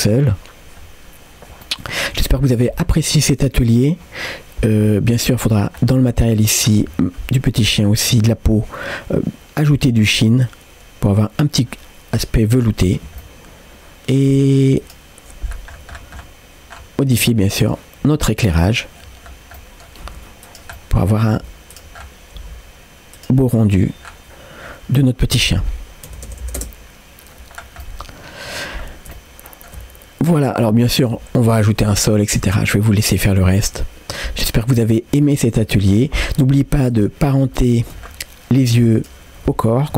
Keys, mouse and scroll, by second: 0.8-1.5 scroll up 2, 1.6-3.4 middle drag, 4.0-4.7 scroll up 1, 5.2 click, 5.8 scroll down 2, 7.0-7.8 scroll down 4, 8.2-8.7 scroll down 1, 10.4-13.2 drag, 13.2 middle click, 15.1 click, 15.5-16.0 scroll down 2, 16.2-16.7 scroll down 4, 17.6 scroll down 1, 17.6 click, 18.1 g, 19.0-19.6 scroll up 4, 19.6 middle click, 20.1 g, 20.8 middle click, 21.4 g, 22.0 scroll up 1, 22.4 g, 23.5 middle click, 24.1-24.7 scroll up 2, 25.5-27.2 drag, 26.4 KP_0, 27.6 scroll down 2, 27.9 middle click, 29.2 ctrl+middle click, 31.0 shift+a, 33.4 click, 34.7 click, 35.2 middle click, 36.2 scroll up 2, 36.9 click, 37.6 shift+middle click, 38.1-38.5 scroll up 1, 38.9-39.9 shift+drag.